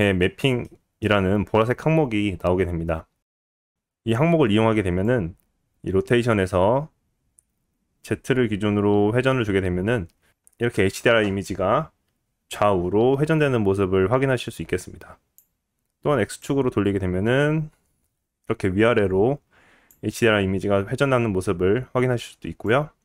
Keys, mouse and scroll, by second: 0.0-2.1 middle drag, 5.6-8.5 drag, 8.7 click, 9.1-10.4 drag, 10.9-23.0 drag.